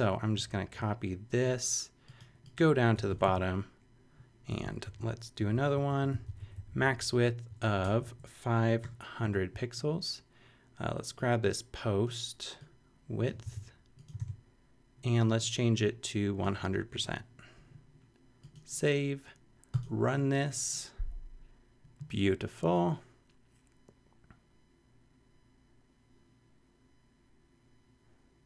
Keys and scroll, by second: 2.9 Return, 3.4 super+v, 4.5 Return, 4.8 shift+], 5.4 shift+Up, 5.9 super+Right, 6.1 super+Left, 6.8 Left, 7.5 shift+Left, 7.8 shift+BackSpace, 8.0 Right, 8.8 0, 13.4 super+c, 14.2 super+v, 16.6 1, 16.9 0.